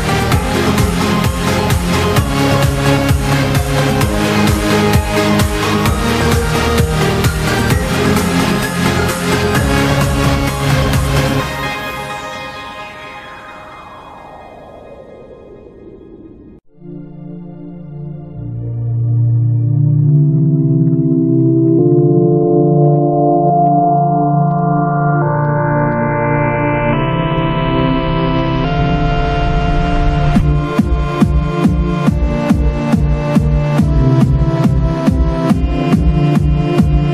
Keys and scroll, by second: 2.7 j, 3.2 z, 5.5 ctrl+v, 6.0 p, 7.4 j, 10.2 v, 13.2 g, 14.4 j, 18.6-19.8 typing, 22.2 ctrl+shift+s, 26.2 z, 29.8 z, 31.9 z, 32.6 z, 35.8 0.